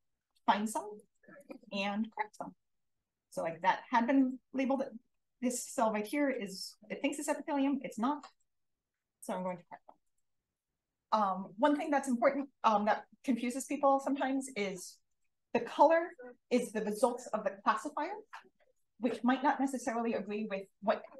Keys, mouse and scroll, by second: 0.5 d, 1.0 click, 1.8 d, 7.1 click.